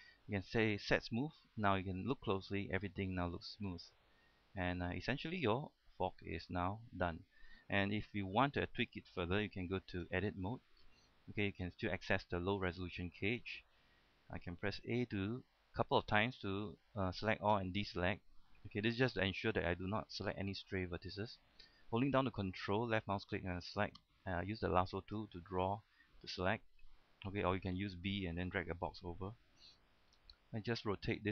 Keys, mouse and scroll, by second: 1.2 click, 2.0-2.7 scroll up 1, 3.2-3.8 scroll down 1, 4.3-9.0 middle drag, 10.3 Tab, 10.8-11.4 scroll up 1, 11.7 KP_3, 12.6 scroll up 1, 13.0 shift+middle click, 13.7-14.3 scroll down 1, 15.1 a, 16.1 a, 16.7 a, 17.8 a, 23.3-25.4 ctrl+drag, 30.5 r.